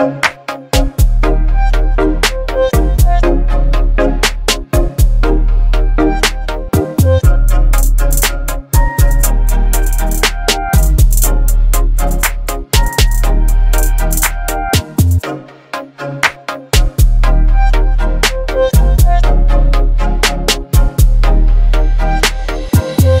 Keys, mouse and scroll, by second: 2.9 click, 10.4-12.8 scroll down 1, 16.0 scroll up 1, 16.6 click, 19.9-22.1 shift+drag, 23.1-23.2 alt+drag.